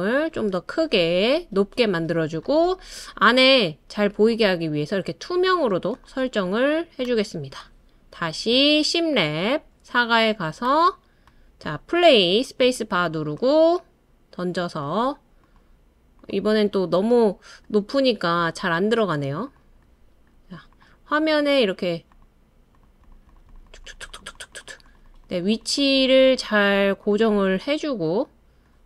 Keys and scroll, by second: 12.6 space.